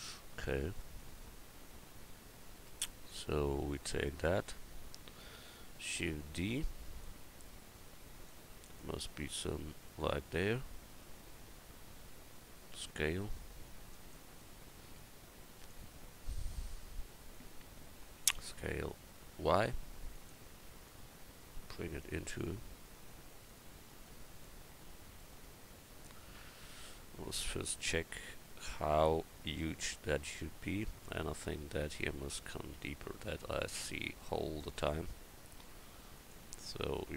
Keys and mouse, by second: 3.7-4.6 right drag, 4.7 right click, 6.0 shift+d, 9.9-10.4 drag, 12.7 s, 18.4 s, 20.9-24.4 drag, 32.7 Tab, 33.2 Tab, 33.5 click, 33.8 Tab, 36.2 click.